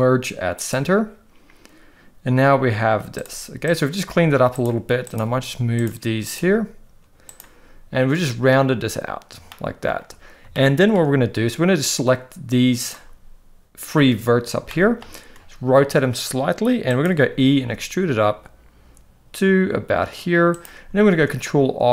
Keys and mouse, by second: 2.4 g, 3.6 click, 4.0 g, 5.0 click, 5.2 g, 6.2 click, 6.4 g, 9.6 shift+middle click, 10.6 shift+middle click, 11.9 click, 14.7 shift+middle click, 15.3 r, 17.6 e, 21.1 ctrl+r.